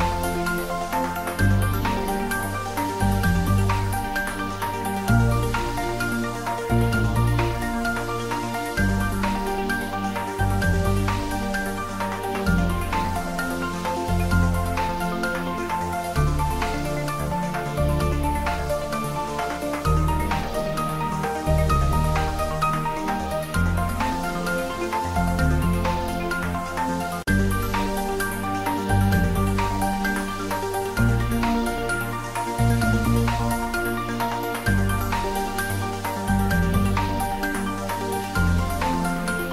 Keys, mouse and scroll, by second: 3.2 click, 3.4 Tab, 4.1-6.0 middle drag, 6.0 ctrl+z, 7.0 click, 7.5 ctrl+z, 8.2 g, 9.6 z, 12.2 click, 12.5 ctrl+b, 17.0 click, 17.1 Tab, 18.2 click, 19.3 middle click, 20.7 click, 21.6 click, 21.9 ctrl+middle click, 22.3-25.1 typing, 23.1 click, 24.2 click, 25.9 click, 26.2 ctrl+s, 26.5 ctrl+middle click, 27.5 middle click, 28.4 click, 29.0 middle click, 29.6 ctrl+middle click, 30.5 ctrl+middle click, 31.1 middle click, 32.3 ctrl+middle click, 33.0 ctrl+middle click, 33.8 click, 35.5 shift+click, 35.8 middle click, 36.4 click, 36.9 shift+click, 38.4 ctrl+j.